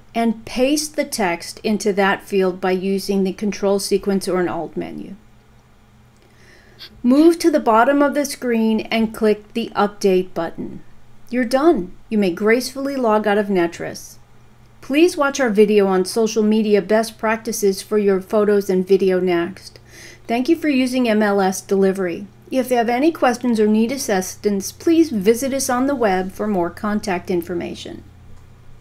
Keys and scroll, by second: 1.9 ctrl+v.